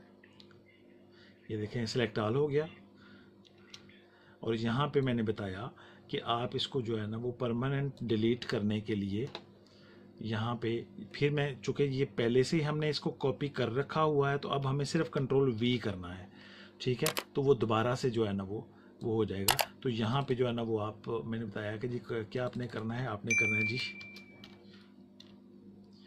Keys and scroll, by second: 3.5 space, 15.5 ctrl+v, 24.0 shift+s, 24.7 h, 25.6 i.